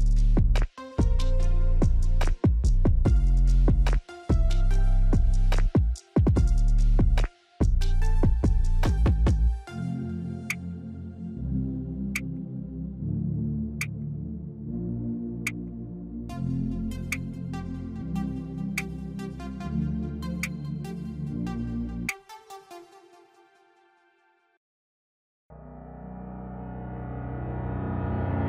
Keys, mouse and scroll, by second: 6.6 alt+click, 8.2 ctrl+click, 10.8 click, 12.4 alt+click, 13.4 alt+click, 14.9 alt+click, 16.0 alt+click, 18.0 click, 21.6-23.8 scroll down 1, 23.8-25.6 drag.